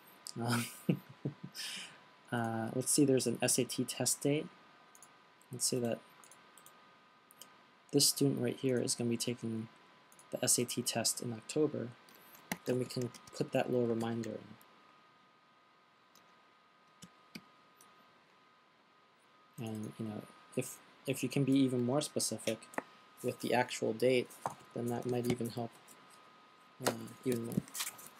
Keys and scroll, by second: 6.2 fn+Delete, 11.0 fn+Delete, 12.6-14.9 typing, 16.3-17.9 typing.